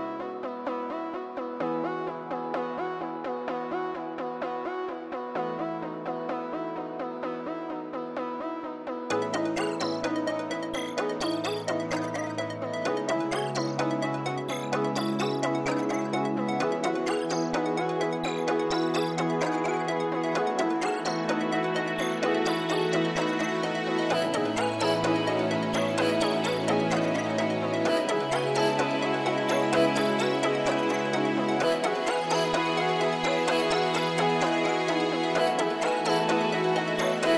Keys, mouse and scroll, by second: 19.7 scroll up 1, 20.4-21.6 scroll down 1, 21.7-22.3 scroll up 1, 22.4 scroll down 1, 33.6 scroll down 1, 33.7-34.1 scroll up 1, 34.2-34.7 scroll down 1.